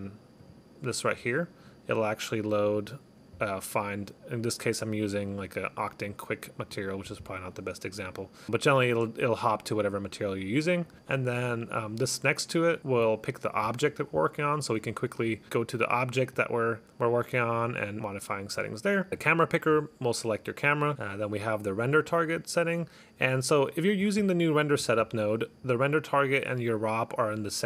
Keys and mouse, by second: 0.5 click, 2.8 click, 6.7 click, 7.6 click, 8.4 click, 10.9 click, 11.4 click, 13.7 click, 14.9 click, 16.5 click, 17.4 click, 17.7 click, 18.0 click, 19.2 click, 22.1 click.